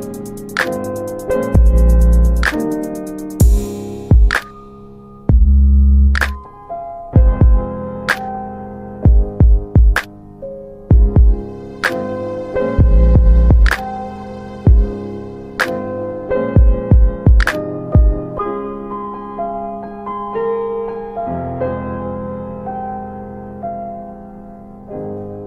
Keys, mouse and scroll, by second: 0.5 right click, 1.3 click, 3.3 double right click, 4.1 alt+middle click, 11.5 click, 13.3 w, 14.1 alt+middle click, 14.4 alt+w, 14.8 middle click, 15.0 scroll down 1, 16.2 click, 17.1 alt+middle click, 19.4 alt+middle click, 21.1 alt+middle click, 22.4 ctrl+alt+middle click, 24.0 click.